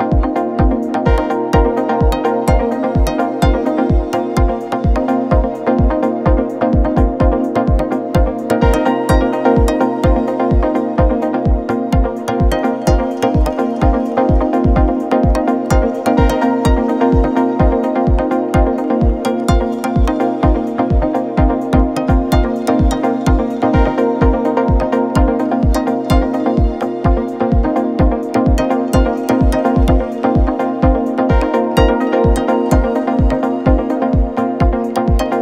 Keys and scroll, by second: 0.2 ], 1.2 4, 1.8 3, 6.6-7.9 typing, 9.4 ], 12.8 ], 13.6 ctrl+z, 19.1 ], 19.4 ], 20.1 4, 24.2-25.2 typing, 26.4 ], 27.8 ], 32.9 Escape.